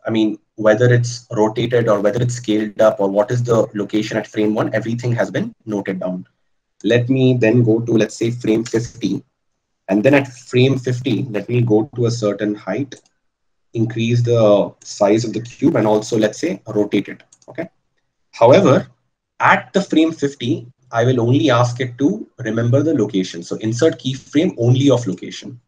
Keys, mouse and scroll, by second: 12.0 g, 20.7 i.